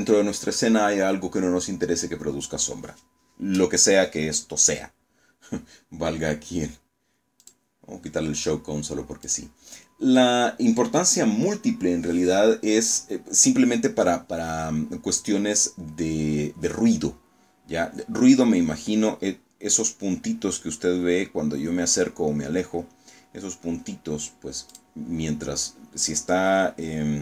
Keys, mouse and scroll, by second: 6.3 click, 8.1 click, 13.9-14.5 scroll up 1, 17.5 scroll down 1, 18.0 scroll up 1, 18.5 scroll down 1, 18.9 scroll up 2, 19.2 scroll down 2, 19.6 scroll up 2, 19.9 scroll down 2, 20.3 scroll up 2, 20.9 scroll up 2, 21.2 scroll down 2, 21.5 scroll up 2, 23.6 click.